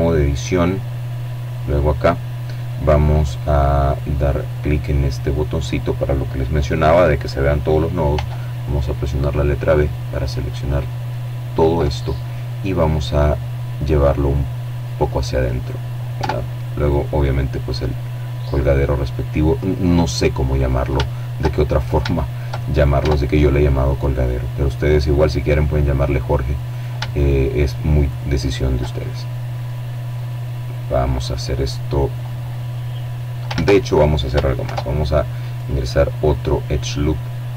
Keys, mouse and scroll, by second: 0.0-0.4 scroll up 1, 2.1 click, 6.4 b, 7.0-9.9 drag, 10.9-14.1 drag, 14.5 Tab, 15.1 right click, 15.9-18.3 drag, 18.3 right click, 19.3 shift+middle click, 20.2 shift+middle click, 20.9 right click, 21.3 Tab, 21.9-23.4 middle drag, 24.1-24.7 scroll up 1, 24.9 shift+right click, 26.3 right click, 27.3-28.4 middle drag, 31.8 ctrl+z, 32.8 ctrl+r, 33.8 click, 35.9 click, 37.0 ctrl+r, 37.4 ctrl+click.